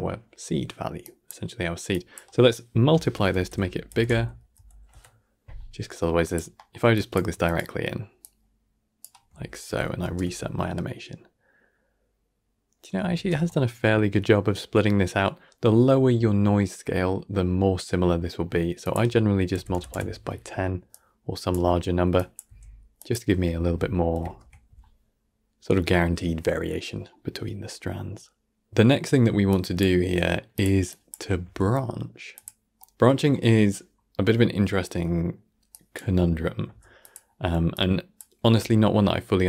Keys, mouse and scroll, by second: 6.4-6.8 middle drag, 6.8 click, 9.6 shift+Left, 9.9 shift+space, 13.0 shift+space, 13.3-18.7 middle drag, 18.7-22.3 drag, 22.3 g, 24.0 shift+Left, 24.2 shift+space, 28.7 shift+space, 28.9-29.4 scroll down 1, 29.4-32.9 drag, 32.9-33.2 scroll down 1, 33.2-33.8 middle drag, 33.8-34.3 scroll down 1, 34.3-34.8 middle drag, 34.8 scroll down 1, 34.9-35.6 middle drag, 35.6 click.